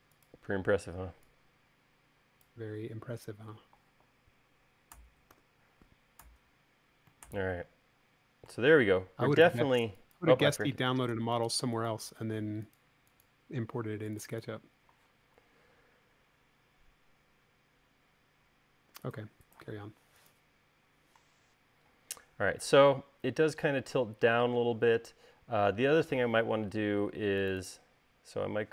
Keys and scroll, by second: 5.8 u, 11.2 space, 19.4 u.